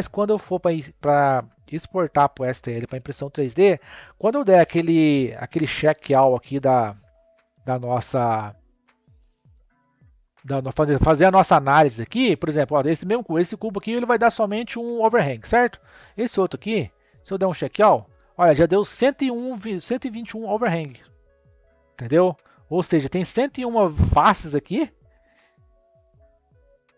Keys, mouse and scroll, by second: 5.6 n, 11.4-13.3 drag, 14.2-16.1 drag, 17.3-20.4 drag, 22.3-22.9 scroll down 3, 22.9-24.6 middle drag, 24.6 Tab, 26.1 click.